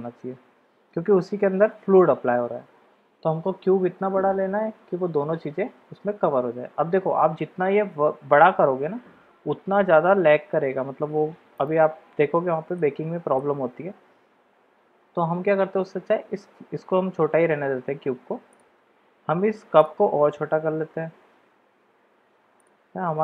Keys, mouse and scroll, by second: 3.4 s, 12.7-13.4 middle drag, 13.9 s, 19.8-20.2 drag, 20.2 s.